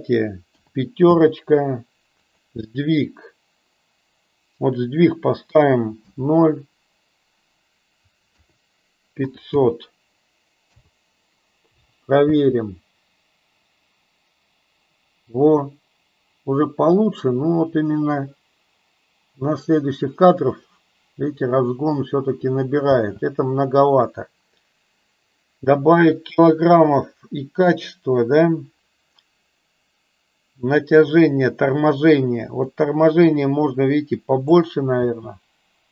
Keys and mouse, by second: 2.3-11.0 drag, 9.4 KP_0, 12.2 space, 22.9 space, 32.6-34.4 drag, 34.8 space.